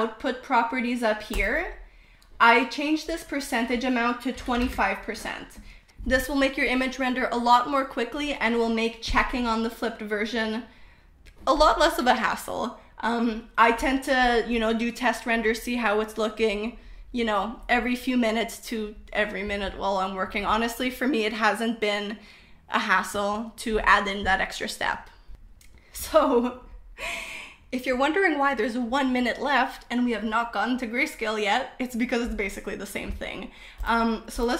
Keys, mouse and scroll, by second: 1.9 click, 3.3-5.5 drag, 6.7 F12, 9.5-10.8 middle drag, 25.7 click, 28.9-30.0 drag, 32.5 middle click.